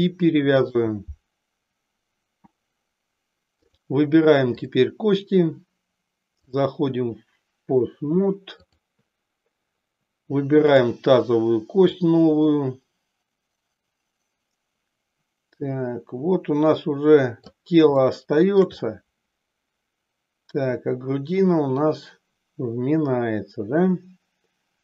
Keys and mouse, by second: 4.6 click, 6.5-8.8 drag, 10.7 click, 12.0-17.7 drag, 18.1-24.8 shift+middle drag.